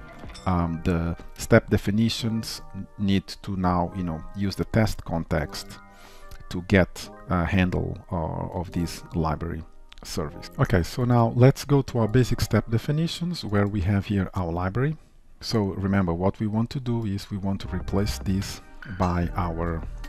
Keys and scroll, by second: 18.8 ctrl+w.